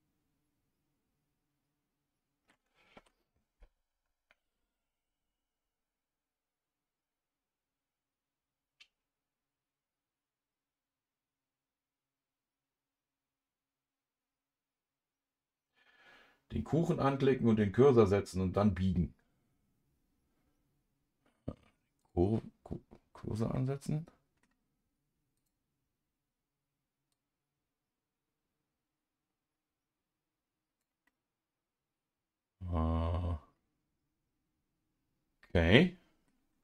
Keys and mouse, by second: 2.9 ctrl+z, 22.0 click, 23.5 middle click, 27.1-31.1 drag, 31.1-36.3 middle drag.